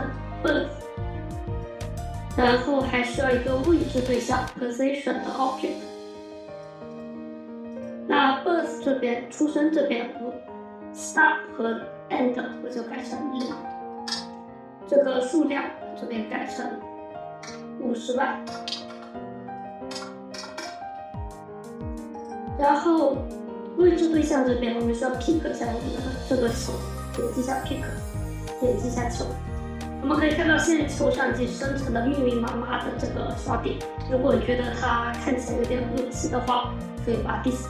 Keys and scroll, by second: 13.2 0, 13.9 Return, 17.2 5, 18.6 typing, 19.7-20.1 typing, 20.4 Return.